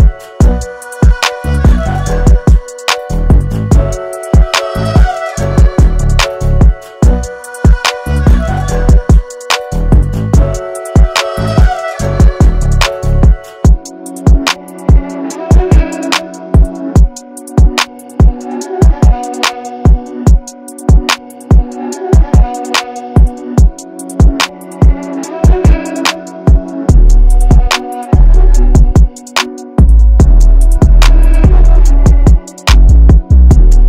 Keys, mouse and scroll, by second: 0.0 click, 3.3 right click, 6.5 click, 8.5 typing, 9.5 Return, 11.6 ctrl+d, 13.0 click, 14.2 right click, 17.9 click, 31.8 click, 33.2 b.